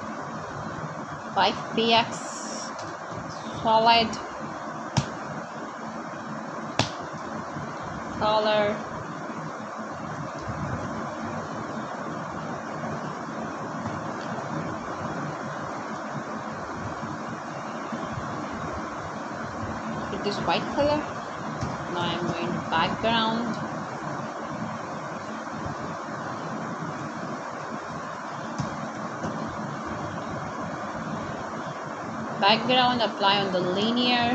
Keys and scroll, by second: 0.0-0.7 typing, 6.0 Return, 6.2-7.2 typing, 8.6 BackSpace, 10.0 BackSpace, 11.0 Right, 11.4 BackSpace, 13.0 Return, 13.4 b, 13.7 a, 19.4-20.7 typing, 26.9-27.9 typing, 29.5-31.0 typing, 32.1-34.3 typing.